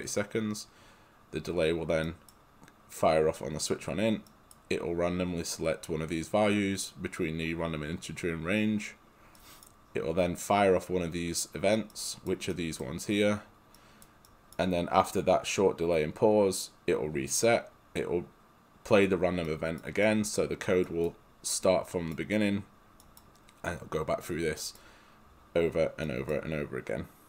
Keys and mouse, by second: 2.1 right click.